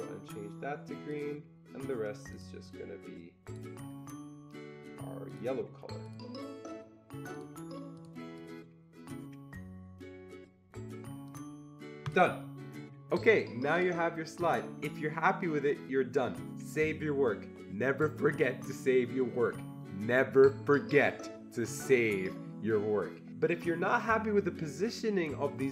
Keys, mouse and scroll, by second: 2.3 click, 2.6-6.0 drag, 6.0-7.3 drag, 7.3 click, 8.0 click, 8.4-12.0 drag, 12.0 click.